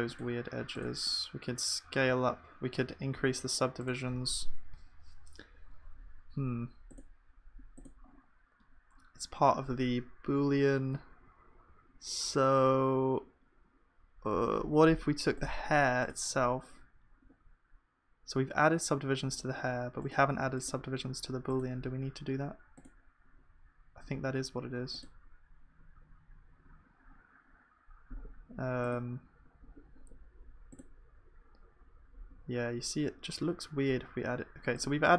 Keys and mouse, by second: 0.4-35.1 drag.